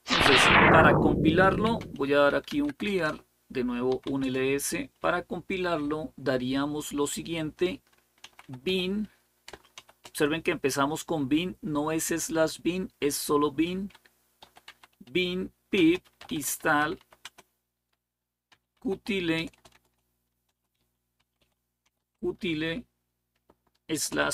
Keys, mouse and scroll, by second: 1.2-5.8 typing, 7.8-9.6 typing, 13.5-22.3 typing, 23.7-24.3 typing.